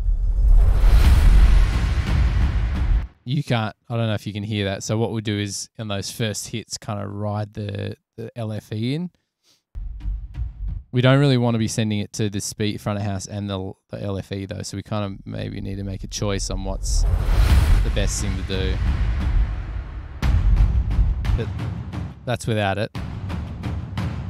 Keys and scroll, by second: 3.1 space, 9.8 ⊔.